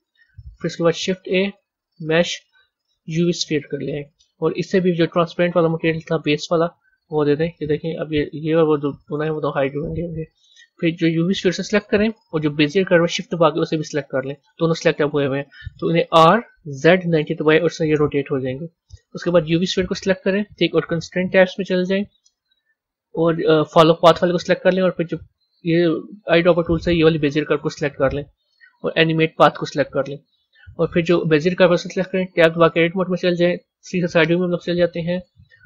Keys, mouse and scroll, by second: 0.9 shift+a, 5.0 click, 5.8-7.7 drag, 7.7 z, 8.3 click, 9.3 a, 9.8 z, 11.4 click, 13.7 shift+click, 16.0 r, 19.2 click, 21.1 click, 22.5-25.4 drag, 29.1 click, 31.6 click, 32.5 b, 33.7 KP_3, 35.2-35.6 scroll down 3.